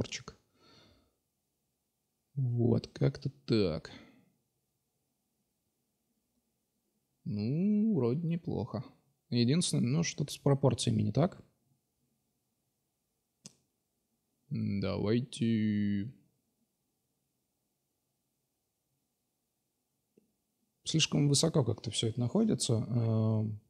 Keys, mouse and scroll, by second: 1.5-1.8 middle drag, 4.9-5.8 middle drag, 6.9 middle click, 8.2-8.6 middle drag, 12.4 middle click, 13.0-14.0 drag, 14.5 Tab, 15.5 Tab, 15.9-16.8 drag, 17.1 Tab, 19.8 KP_Divide, 21.1-22.1 middle drag, 23.1 Tab.